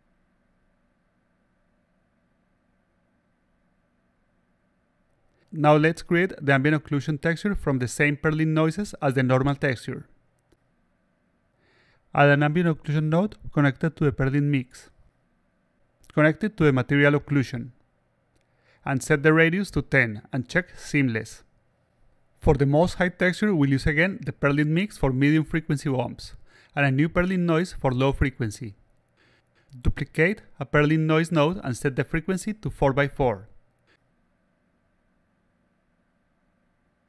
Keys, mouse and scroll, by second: 0.9 alt+click, 1.8-3.4 drag, 4.2-5.6 drag, 5.9 click, 6.7 click, 7.5 middle click, 7.8-8.8 drag, 9.8-10.3 alt+drag, 12.5 click, 14.0-14.6 drag, 15.0 click, 16.4-17.8 drag, 19.0 click, 21.2 click, 29.2-30.8 shift+drag, 31.3 click, 31.4 click, 32.3 click, 32.7 click, 35.1 click.